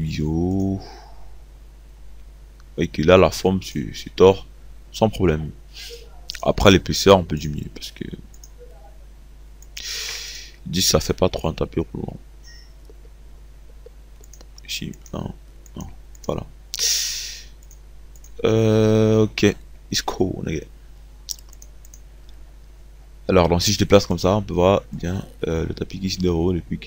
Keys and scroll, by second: 10.2 KP_2, 15.2 KP_1.